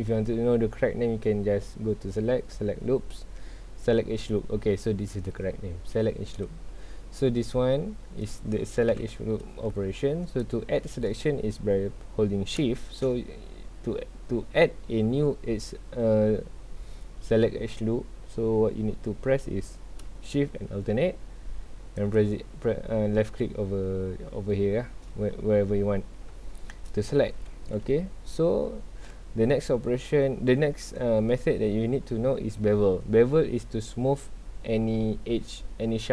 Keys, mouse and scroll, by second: 0.1-3.2 drag, 7.0 scroll down 1, 7.2-8.9 middle drag, 8.9 KP_1, 9.6 scroll up 1, 10.2 scroll down 1, 22.0 alt+shift+click, 26.4-28.1 shift+middle drag, 28.1 scroll up 1, 29.0-32.1 shift+middle drag.